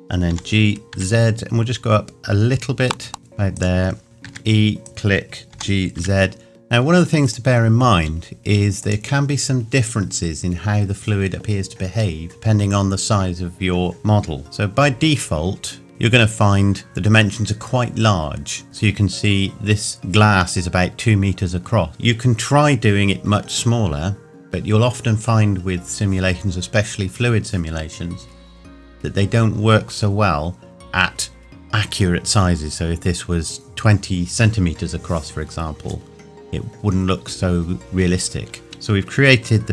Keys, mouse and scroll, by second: 0.3 g, 3.6 click, 4.3 e, 4.8 click, 5.6 g, 7.3 click, 8.0 s, 8.8 click, 14.8 n, 15.9 Tab, 38.6 Tab.